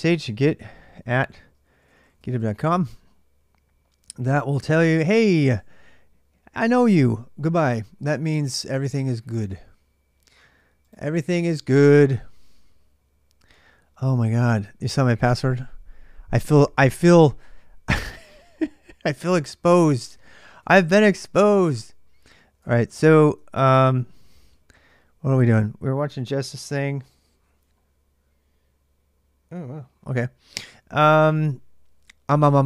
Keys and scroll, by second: 0.0-32.6 typing, 2.4 Return, 22.4 super+Tab.